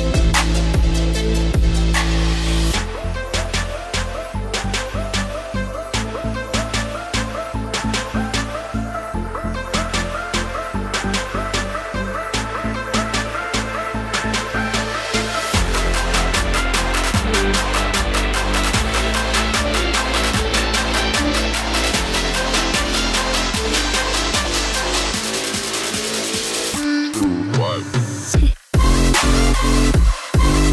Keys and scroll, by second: 20.8 [, 28.1 ].